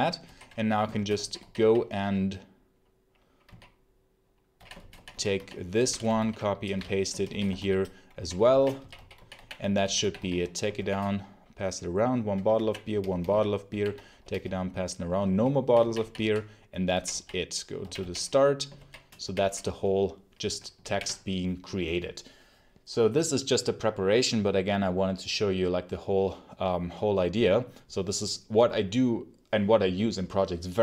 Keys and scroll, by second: 6.1 ctrl+l, 6.4-10.6 typing, 12.0-18.6 typing, 20.7 ctrl+s.